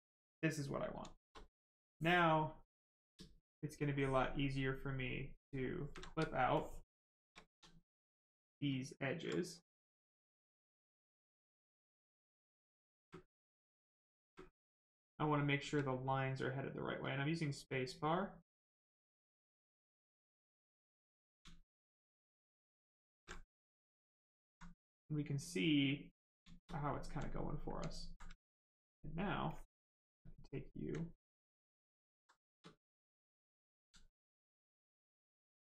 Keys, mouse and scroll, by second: 0.6 right click, 0.7 right click, 0.9 shift+right click, 1.7 ctrl+click, 7.4 ctrl+z, 8.0 ctrl+click, 11.2 ctrl+click, 11.7 click, 14.1 space, 16.3 space, 20.1 ctrl+click, 23.4 right click, 24.4 alt+right click, 24.8 right click, 26.3 shift+right click, 26.7 alt+right click, 28.2 ctrl+right click, 29.4 ctrl+click, 35.3 right click.